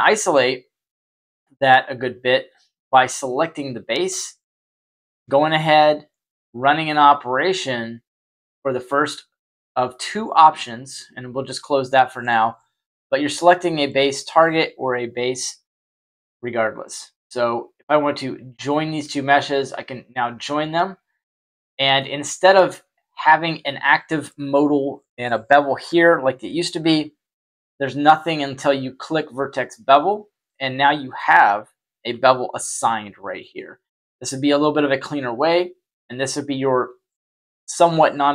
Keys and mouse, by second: 0.1 click, 4.8-5.1 shift+middle drag, 7.1 click, 10.3 click, 14.4 middle click, 19.9 click, 21.3-21.9 middle drag, 29.1 click, 30.4-31.1 middle drag, 32.0 z, 32.7 middle click, 34.5-37.7 drag.